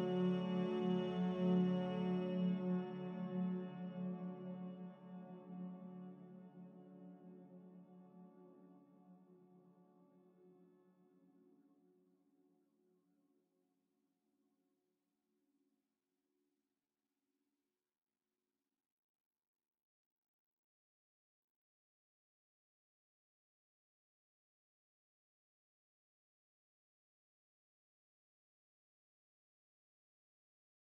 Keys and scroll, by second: 1.1 v, 13.2 Escape.